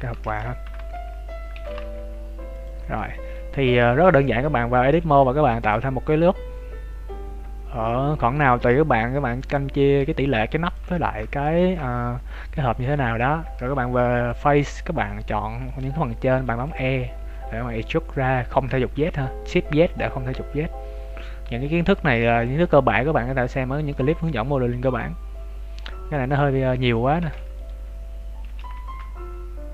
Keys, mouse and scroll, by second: 3.2 right click, 3.7 Tab, 4.8 ctrl+r, 9.7-10.7 scroll up 2, 10.0 ctrl+Tab, 10.9 shift+middle click, 10.9 shift+scroll up 1, 11.8 z, 12.3 right click, 13.4 b, 16.4 e, 17.1 s, 23.4 z, 23.9 middle click, 27.1 shift+s, 28.4 s.